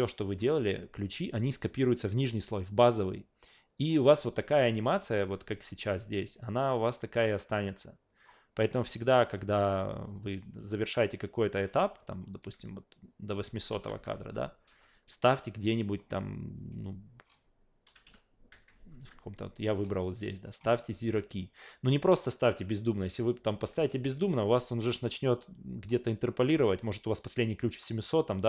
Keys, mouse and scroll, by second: 1.9 click, 6.4-8.2 drag, 8.8 click, 9.1 right click, 10.1 click, 11.0-11.6 drag, 12.1 click, 12.4 a, 13.1 click, 15.4-16.0 drag, 17.2 click, 19.9 click, 23.0 click, 23.7 alt+click, 24.1 ctrl+z, 25.9 click, 28.1-28.4 drag.